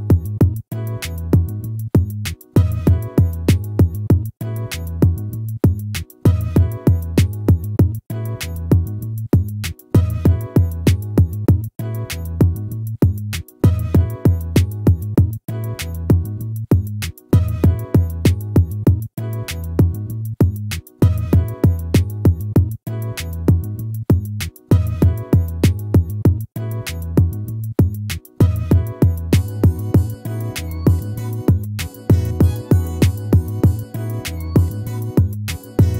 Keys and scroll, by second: 0.1 ctrl+z, 2.6 ctrl+-, 12.5 ctrl+z, 29.2 ctrl++.